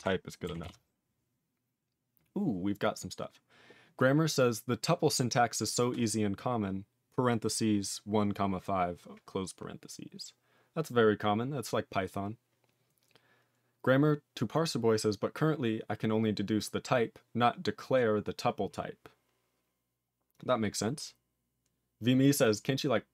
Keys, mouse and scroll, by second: 0.6 ctrl+s.